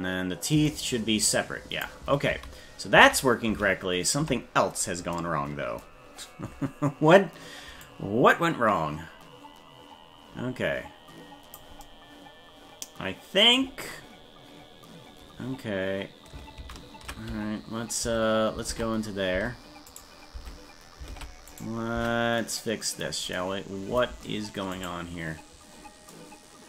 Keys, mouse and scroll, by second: 0.7-1.9 drag, 2.4 ctrl+z, 3.2 ctrl+z, 3.6 ctrl+z, 7.9-11.6 drag, 13.9-14.7 scroll up 4, 16.7 ctrl+z, 18.0 Tab, 18.7 ctrl+Tab, 20.4 Tab, 21.1 ctrl+Tab, 21.6 right click, 22.0 Tab, 24.7 right click.